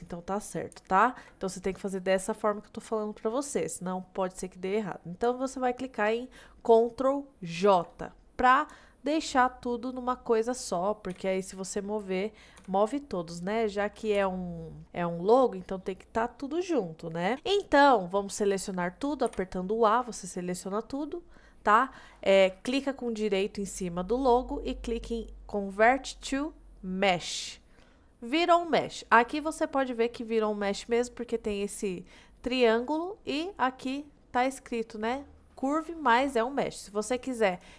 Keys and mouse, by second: 7.6 ctrl+j, 8.9-9.3 middle drag, 9.5-10.5 middle drag, 11.2 g, 12.7 g, 14.2 ctrl+z, 14.8 middle click, 19.4 a, 21.1 middle click, 22.2 middle click, 23.6-27.3 right drag, 33.9 click, 35.7 click, 36.2 click, 37.2 click, 37.6-37.7 drag.